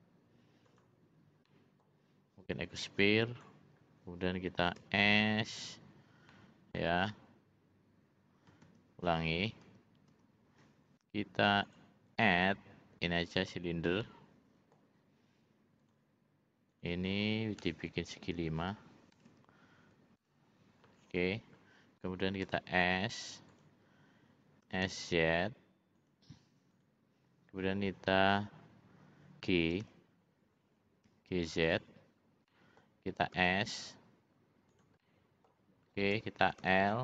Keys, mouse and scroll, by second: 1.4 middle click, 2.9 click, 4.7 s, 6.2 middle click, 8.7 ctrl+z, 9.6 ctrl+z, 11.6 ctrl+z, 11.6-13.5 drag, 14.0 middle click, 15.8 click, 16.6-20.9 drag, 22.4 s, 24.6 s, 26.8 click, 29.8 g, 32.5 middle click, 32.8 scroll down 1, 33.4 s, 35.0 middle click, 35.5 scroll down 1, 36.6 l.